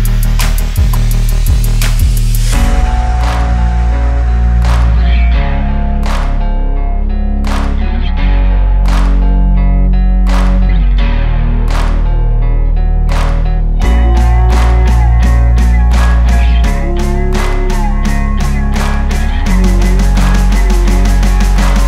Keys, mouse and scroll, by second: 0.3 click, 0.7 click, 1.0 click, 2.0-3.7 drag, 4.6 scroll down 5, 4.7 ctrl+s, 5.0 click, 6.1 alt+a, 6.6 click, 7.1 n, 7.6 click, 7.6 ctrl+h, 7.8 ctrl+h, 7.9 click, 8.8 ctrl+t, 9.5 click, 10.0 click, 10.1 ctrl+h, 10.2 click, 10.9 alt+a, 12.2 shift+click, 12.9 alt+s, 13.0 click, 13.1 click, 13.2 alt+a, 13.3 click, 13.8 shift+click, 14.4 alt+a, 14.6 click, 14.8 Tab, 15.8 Tab, 16.5 Tab, 16.7 click, 17.2 Tab, 18.3 click, 18.9-20.4 typing, 20.7 alt+a, 20.9 click, 21.5 click.